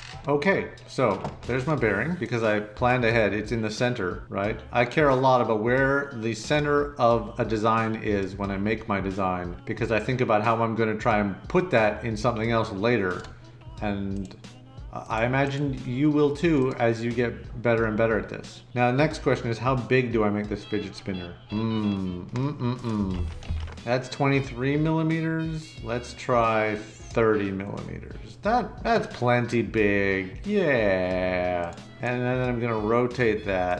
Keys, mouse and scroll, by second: 23.1 ctrl+c, 23.4 ctrl+v, 33.6 click.